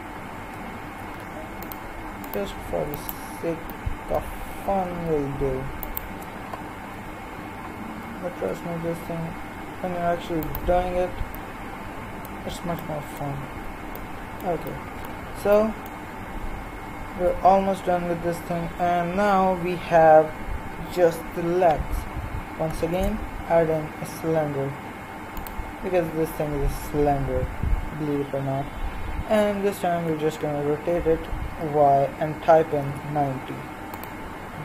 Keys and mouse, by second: 0.9 ctrl+r, 2.9-4.4 right drag, 4.4 z, 6.9 KP_3, 8.1 g, 13.5 z, 16.9 middle click, 17.2 KP_3, 22.9 shift+a, 30.0 r.